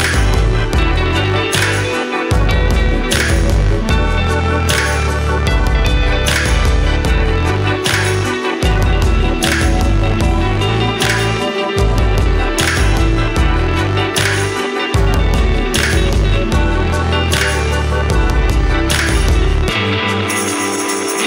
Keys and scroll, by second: 6.2 ctrl+z, 8.8 ctrl+z, 9.0 ctrl+g, 16.4 ctrl+c, 16.5 ctrl+v, 19.0 ctrl+z, 19.5 ctrl+u.